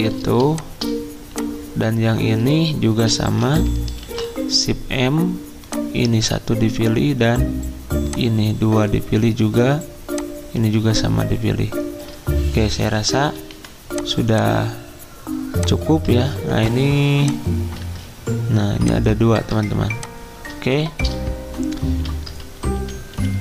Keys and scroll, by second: 4.0 m, 12.9-13.5 typing, 16.1 ctrl+z, 17.8 ctrl+z, 21.0 d, 22.7-23.4 typing.